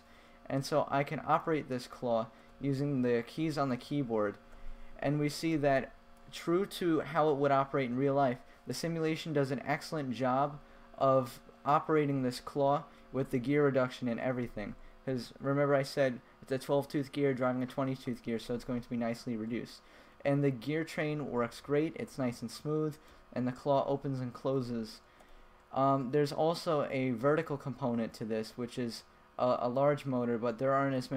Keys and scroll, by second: 0.7 Left, 2.0 Right, 3.1 Left, 4.1 Right, 5.2 Left, 9.4 Left, 10.4 Right, 11.2 Right, 11.7 Left, 12.7 Right, 13.7 Left, 14.7 Right, 19.0 Left, 19.7 Right, 20.9 Left, 21.9 Right, 22.7 Left, 23.6 Right, 24.5 Left, 25.3 Right, 25.9 Up, 26.8 Down, 27.8 Down, 28.2 Up, 29.2 Down, 30.5 Up.